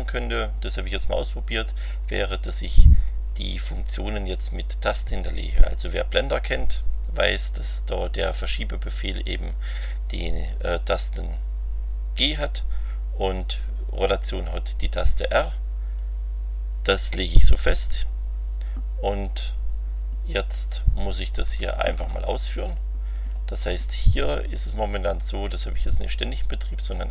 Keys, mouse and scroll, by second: 20.3-23.3 drag.